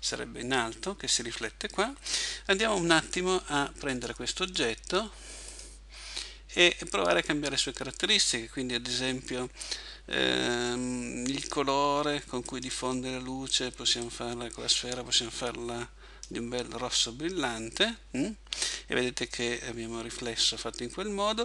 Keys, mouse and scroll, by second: 2.8 Escape, 4.0 right click, 12.5 click.